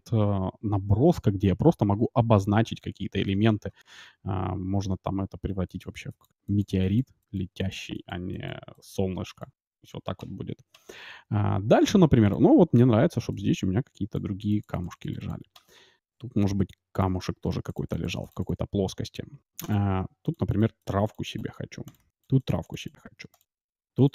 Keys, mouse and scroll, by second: 5.2-10.2 d, 5.6-11.5 drag, 12.3-24.1 drag, 12.7 d, 13.3-15.5 d, 15.7 d, 15.9-18.5 d, 20.0-24.1 typing.